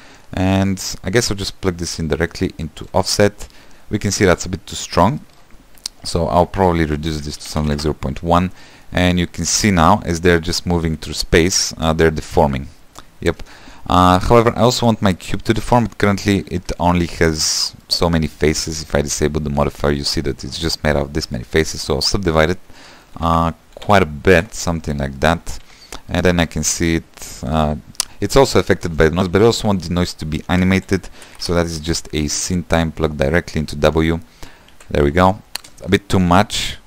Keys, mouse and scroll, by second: 8.1 click, 9.0-11.2 middle drag, 11.2-13.5 typing, 14.4 shift+middle click, 15.0 space, 15.9 space, 16.2 Tab, 17.0-19.9 shift+middle drag, 19.9 click, 20.6-21.7 middle drag, 21.7 click, 22.9 right click, 23.3 middle click, 23.7 shift+r, 24.3 shift+r, 24.8 shift+r, 25.6 shift+middle click, 26.1 Tab, 26.4 middle click, 26.7 space, 27.9-29.3 middle drag, 29.3 space, 32.7 shift+a, 34.1 click, 34.4 space, 35.3 =, 36.1 space.